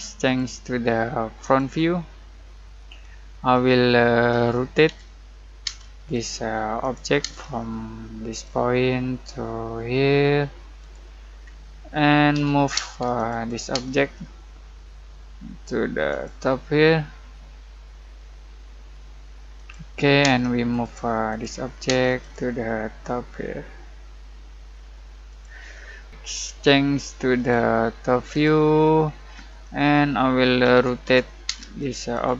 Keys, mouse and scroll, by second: 0.2 click, 3.0-4.3 scroll up 1, 4.3-5.6 typing, 6.1 click, 7.2 space, 8.3 click, 10.8 click, 11.4-12.3 scroll up 1, 12.3 m, 12.7 space, 13.1 click, 13.7 space, 13.9 scroll down 1, 14.1-16.1 middle drag, 16.1 click, 19.5 click, 20.2 space, 20.7 click, 21.8 space, 22.2 click, 25.3 click, 27.3 click, 29.0 scroll down 1, 29.3 middle click, 29.6 scroll up 1, 30.4-32.3 typing, 31.8 click.